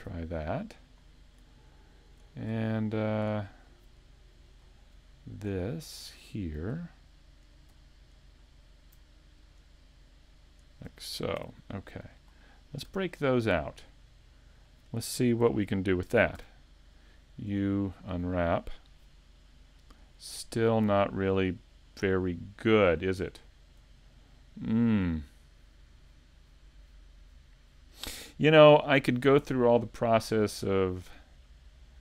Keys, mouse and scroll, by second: 0.0 ctrl+e, 1.2-1.8 scroll down 2, 1.6 shift+middle click, 4.6 scroll up 1, 5.1 shift+middle click, 6.0 scroll up 1, 7.3 alt+right click, 8.3 alt+shift+right click, 9.4 shift+right click, 11.4 ctrl+e, 12.6 scroll down 1, 12.9 a, 13.9 middle click, 24.0 scroll down 1, 24.1 scroll down 1, 26.7 scroll down 2.